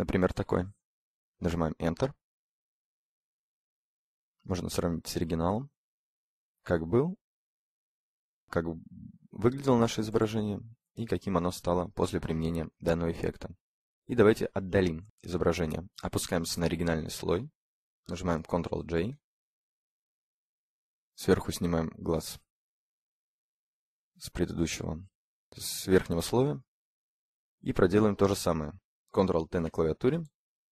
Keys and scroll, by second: 1.1 Return, 17.4 ctrl+j, 28.5 ctrl+t.